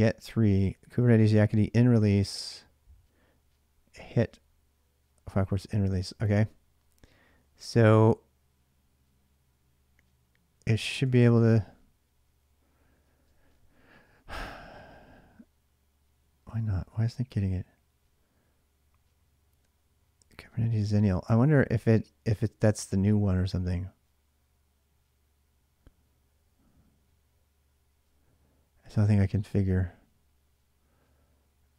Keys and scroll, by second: 7.2 k, 10.9 Return, 16.4 ctrl+a, 16.6 ctrl+a, 29.1 ctrl+a, 29.1 ctrl+a.